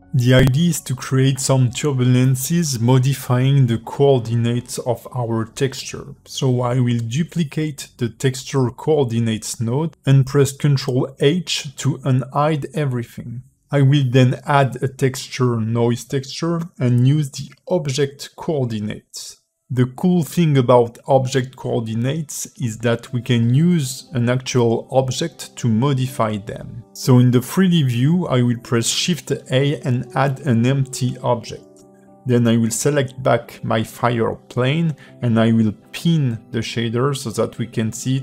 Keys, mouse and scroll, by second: 0.1 click, 0.8 click, 1.3 g, 2.7 shift+middle click, 3.2 scroll up 1.